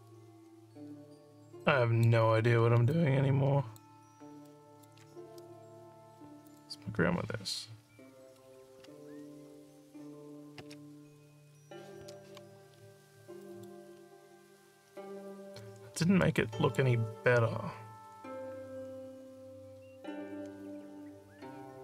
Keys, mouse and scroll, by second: 2.9 alt+click, 4.5 alt+middle click, 6.5 click, 12.7 alt+scroll up 2, 13.4 alt+middle click, 14.0 alt+scroll up 2, 14.9 alt+scroll up 2, 16.2 alt+middle click.